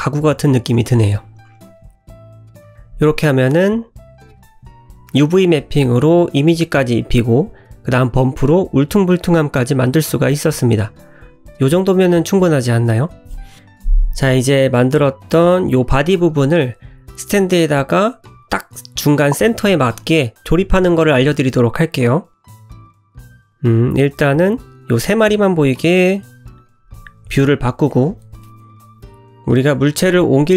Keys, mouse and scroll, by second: 22.5 middle click, 22.5 scroll up 3, 22.6 scroll down 1, 25.1 shift+click, 26.9 /, 27.4 middle click, 28.1 click, 28.5 click, 28.7 g, 29.9 click, 30.4 click.